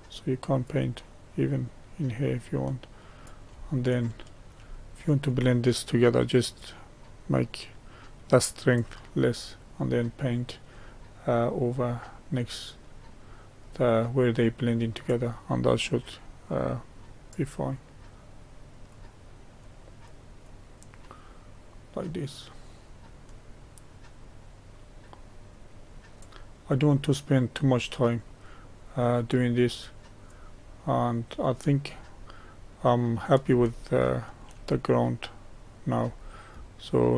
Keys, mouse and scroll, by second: 16.7-29.7 drag, 30.6-31.9 drag, 31.9-32.4 scroll down 1, 32.4 scroll down 1, 32.5-37.1 middle drag.